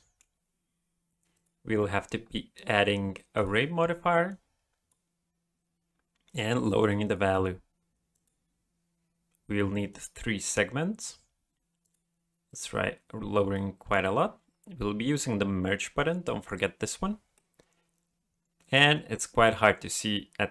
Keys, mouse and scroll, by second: 1.3 click, 4.3 click, 6.3 click, 6.5 click, 6.8 click, 7.0 click, 8.1 click, 9.9 click, 11.8 click, 12.5 click, 13.5 middle click, 15.9 click, 17.3 middle click.